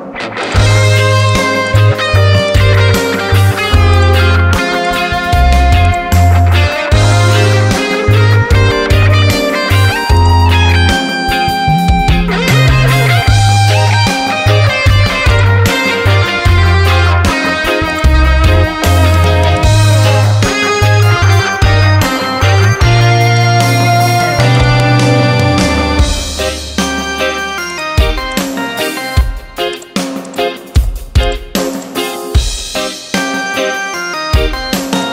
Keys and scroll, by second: 7.1 ctrl+t, 13.3 Return, 21.2 Return.